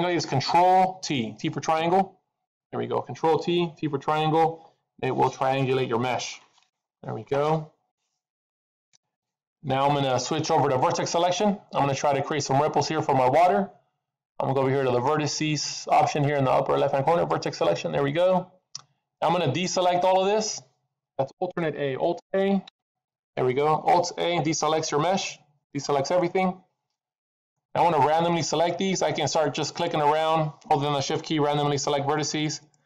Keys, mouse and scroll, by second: 1.9 ctrl+t, 17.2 click, 22.6 alt+a, 29.2 click, 29.6 click, 30.3 click, 31.1 click, 31.6 shift+click, 32.0 shift+click, 32.6 click.